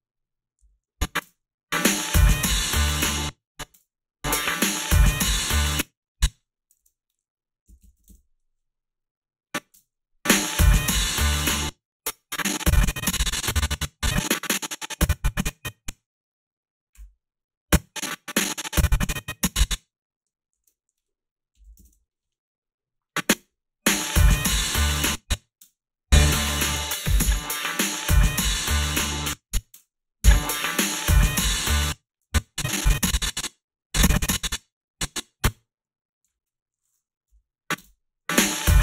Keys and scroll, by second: 0.6 a, 1.2 space, 3.0 space, 3.7 space, 5.5 space, 6.8 alt+shift+s, 7.4-8.4 typing, 9.7 space, 11.4 space, 20.5 alt+shift+s, 21.3-22.3 typing, 23.3 space, 24.8 space, 25.6 space, 29.0 space, 29.7 space, 31.6 space, 37.3 Delete, 37.8 space.